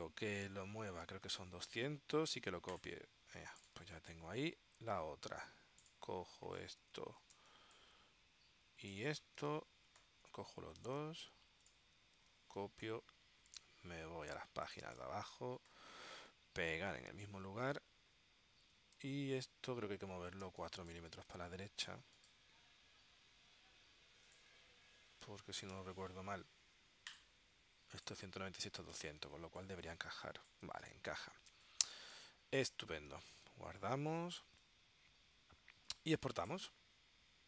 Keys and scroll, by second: 1.0-1.9 typing, 7.5 space, 12.5 super+c, 20.5 space, 25.9 4, 29.1 space, 31.6 space, 33.4 super+s, 34.5 space.